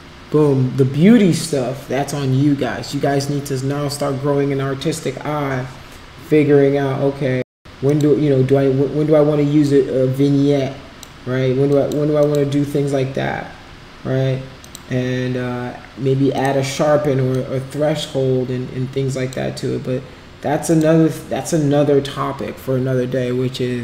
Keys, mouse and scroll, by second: 7.9 click, 10.0-11.1 drag, 11.7 click, 12.2 click, 14.6 click, 16.3 click, 17.3-19.3 drag, 20.7 click.